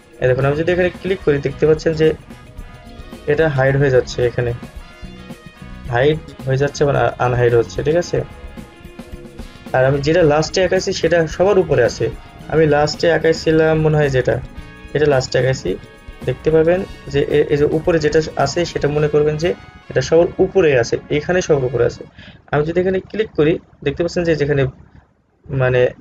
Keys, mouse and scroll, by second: 1.2 click, 9.9-10.5 alt+scroll up 1, 16.4-18.5 scroll up 1, 23.3 click.